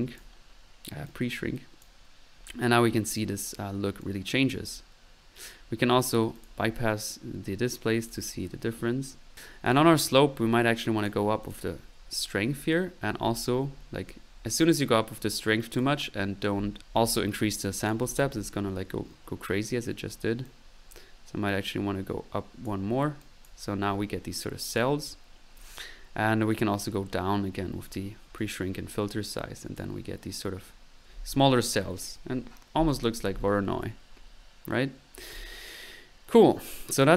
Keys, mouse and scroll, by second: 4.0 click, 6.4 click, 8.1 click, 16.8 click, 17.7 click, 22.6 click, 23.2-23.9 drag, 24.7 click, 26.5-28.0 drag, 28.4 click, 35.4-36.5 drag.